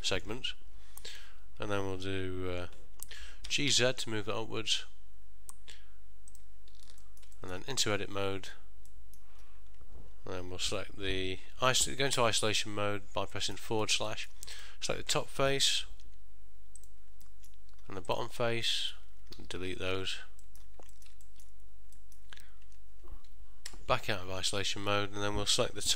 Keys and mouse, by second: 7.1 ctrl+middle click, 7.5 shift+middle click, 7.9 Tab, 9.0 middle click, 12.3 KP_Divide, 13.5 middle click, 13.9 ctrl+middle click, 14.2 shift+middle click, 14.7 click, 16.1 3, 16.9 click, 17.4 middle click, 18.1 shift+click, 18.8 middle click, 19.5 x, 20.5 middle click, 21.0 ctrl+middle click, 21.4 shift+middle click, 22.1 middle click, 22.8 Tab, 23.8 KP_Divide, 24.8 ctrl+middle click.